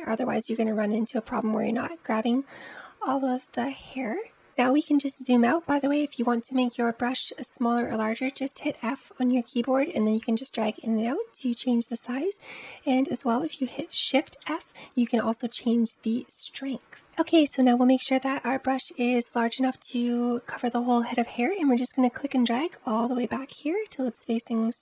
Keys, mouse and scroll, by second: 4.3 scroll down 4, 4.6-7.2 middle drag, 7.2 f, 14.1 shift+f, 19.1-19.7 scroll up 1, 19.7-20.9 scroll down 1, 20.9-21.5 scroll down 1, 21.5-24.6 drag.